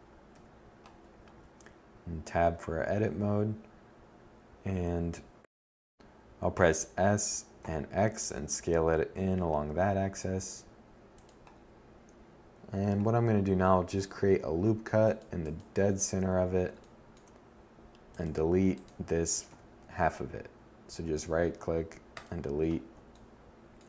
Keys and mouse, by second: 0.6 z, 4.8 s, 12.2 ctrl+r, 17.7 x.